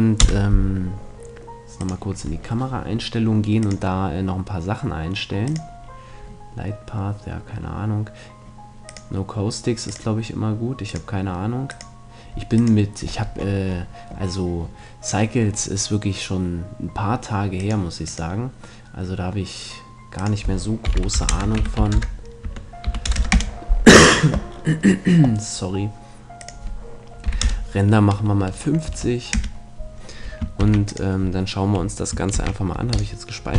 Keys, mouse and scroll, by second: 0.2 KP_0, 1.9-3.4 drag, 3.4 middle click, 3.7-5.4 drag, 5.4 middle click, 5.5-7.1 drag, 7.1-8.9 middle drag, 8.9-14.1 drag, 14.1-17.6 middle drag, 17.6-19.3 drag, 20.2-21.9 drag, 26.4-28.2 drag, 30.6 ctrl+s, 32.3 ctrl+s.